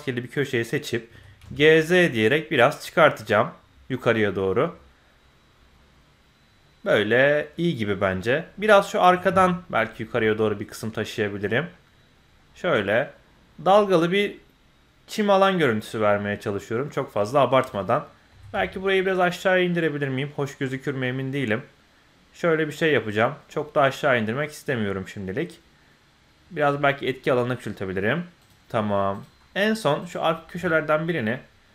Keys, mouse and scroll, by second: 0.4 middle click, 1.1 g, 8.6 click, 9.0 g, 17.6 click, 18.3 g, 29.1 click, 30.0 click, 30.5 g.